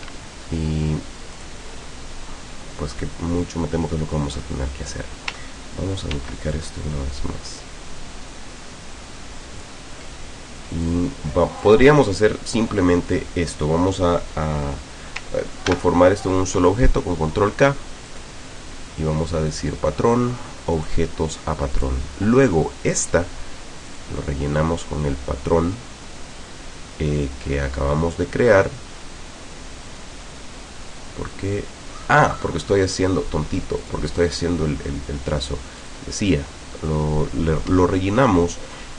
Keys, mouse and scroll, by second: 0.0 Escape, 1.4 click, 6.2 ctrl+d, 6.6-9.9 ctrl+drag, 10.9-11.9 drag, 15.7 ctrl+k, 18.1 click, 20.8 click, 21.8 click, 23.9 click, 30.0-31.9 middle drag, 32.9 click, 33.9 click, 35.8 click, 37.9-38.6 ctrl+scroll down 4.